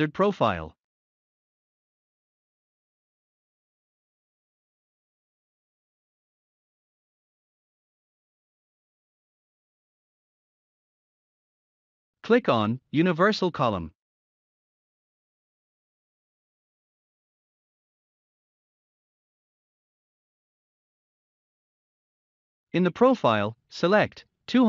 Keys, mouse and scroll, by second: 0.7 click, 5.0 click, 5.6-8.7 scroll up 1, 10.9 click, 17.3 click, 18.0-18.8 scroll up 1, 20.8 click.